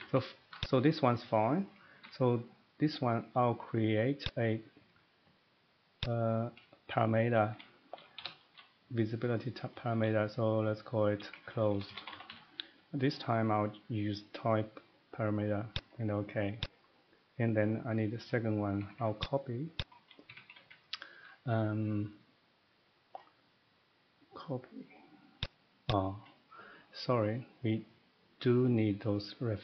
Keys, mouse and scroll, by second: 0.0 Escape, 0.1 Escape, 0.6 click, 1.6 middle click, 4.2 click, 6.0 click, 7.9 typing, 11.3-12.2 typing, 15.7 click, 16.6 click, 17.4 middle click, 18.1 middle click, 18.8 typing, 19.2 click, 19.8 click, 20.3 Escape, 20.5 Escape, 20.6 Escape, 21.0 middle click, 23.2 middle click, 25.4 click, 25.9 click, 26.4 middle click, 27.9 middle click.